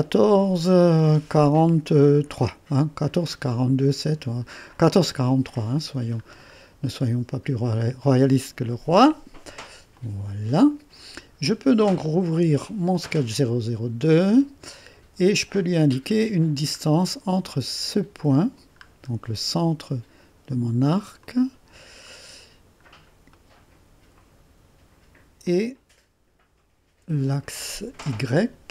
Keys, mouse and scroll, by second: 4.8-5.8 scroll down 2, 6.3-7.3 scroll down 2, 10.0 click, 12.9 click, 14.3-14.7 scroll up 1, 14.7 right click, 15.6-16.2 scroll up 1, 16.2 right click, 16.9 scroll up 1, 18.9-19.3 scroll up 1, 19.3 right click, 21.2 click, 21.9-22.3 scroll down 1, 23.4 right click, 25.5-28.7 drag.